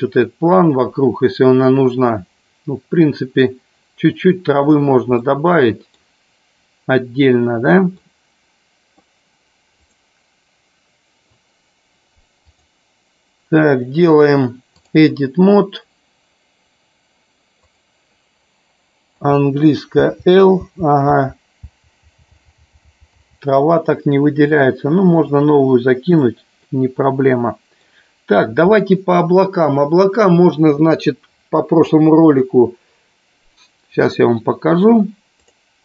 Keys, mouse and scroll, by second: 5.4-6.0 middle drag, 8.0-9.0 middle drag, 12.4-15.3 drag, 17.5 click, 23.4 l, 24.7 click, 26.1 click, 26.8-28.0 middle drag.